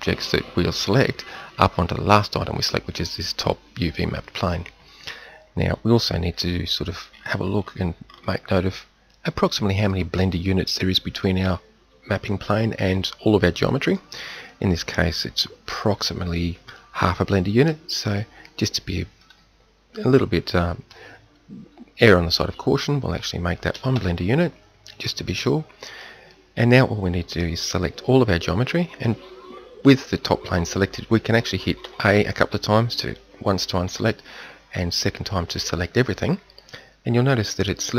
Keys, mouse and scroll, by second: 6.3 KP_1, 19.1-25.0 middle drag, 26.0-27.0 middle drag, 27.8-28.5 middle drag, 31.8 a, 33.8 a.